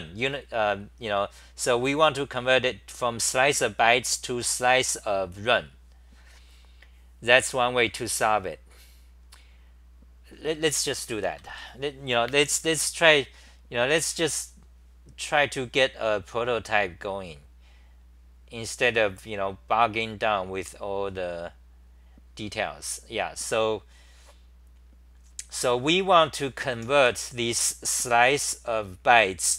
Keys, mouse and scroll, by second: 23.4 scroll down 8, 26.0-26.5 scroll down 8, 26.3-27.5 typing.